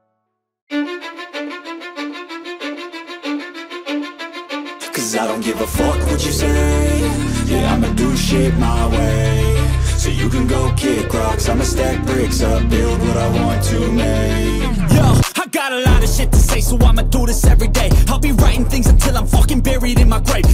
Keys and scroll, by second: 3.2 x, 6.9 x.